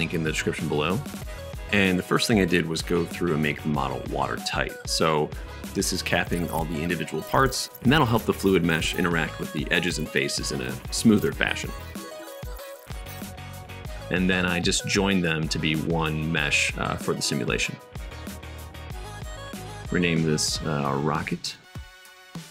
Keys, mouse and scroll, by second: 2.3-4.9 drag, 4.9-6.1 shift+middle drag, 5.4 Tab, 5.8 1, 6.1 2, 6.2 alt+x, 6.3 1, 7.5 2, 7.6 alt+1, 8.4 shift+right click, 9.2 Tab, 9.4 Tab, 9.8-12.5 typing, 10.5 Tab, 10.6 middle click, 10.7-11.9 right drag, 11.0 KP_Enter, 11.3 Tab, 11.9 Tab, 13.8-14.9 middle drag, 19.2-22.4 middle drag.